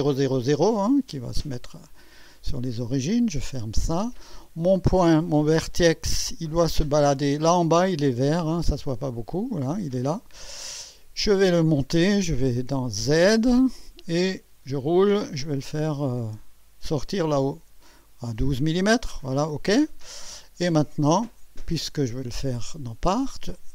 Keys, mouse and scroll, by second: 1.8 click, 3.6 click, 4.3-5.5 drag, 6.4 click, 8.9 scroll up 1, 9.3 scroll down 1, 13.2 click, 14.3-15.8 scroll up 5, 16.2-16.6 scroll up 1, 17.2 scroll up 1.